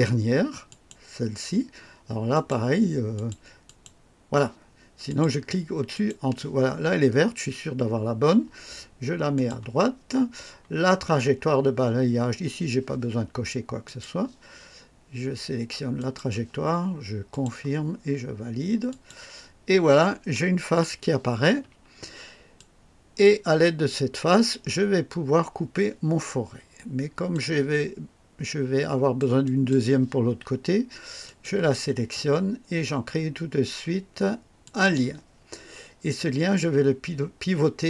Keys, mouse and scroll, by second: 0.7 click, 2.3 click, 3.1 click, 3.6 click, 5.0 click, 5.9 click, 9.3 click, 13.8 click, 15.9 click, 17.3 click, 18.8 click, 21.6 1, 22.5-27.5 drag, 27.7-29.3 drag, 29.4 click, 31.2 click, 34.6 click.